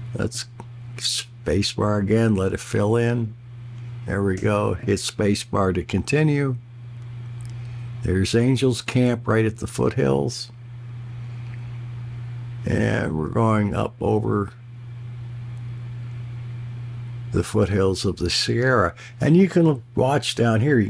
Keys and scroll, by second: 4.4 space.